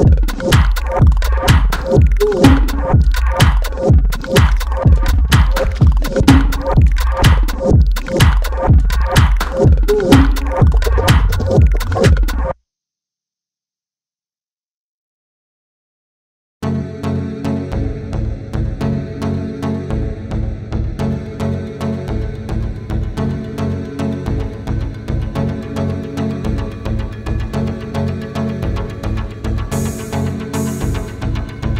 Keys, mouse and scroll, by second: 2.1 ctrl+z, 6.5 ctrl+d, 7.2 ctrl+space, 7.7 ctrl+z, 8.7 click, 9.8 ctrl+d, 10.3 ctrl+space, 10.6 ctrl+click, 10.7-12.2 ctrl+space, 11.5 ctrl+space, 12.8 click, 13.0 space, 14.3 ctrl+space, 14.5 ctrl+click, 14.7 ctrl+space, 16.6-17.6 scroll up 2, 17.9 ctrl+space, 18.2 ctrl+click, 18.2-18.8 ctrl+space, 18.4 ctrl+space, 18.8 click, 19.0-19.8 space, 19.9 space, 21.8 click, 21.9-22.3 space, 22.9 click, 26.7 click.